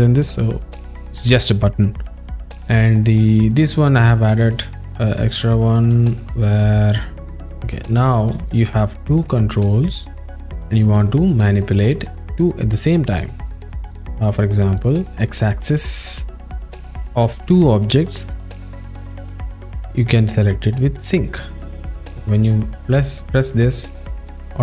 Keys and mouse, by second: 4.5 click, 4.8 click, 6.4 alt+middle click, 7.3 a, 8.0 alt+shift+middle click, 9.5-10.9 alt+middle drag, 14.8 click, 20.7 click, 21.1 click, 22.4 click, 22.9 click, 24.1 click.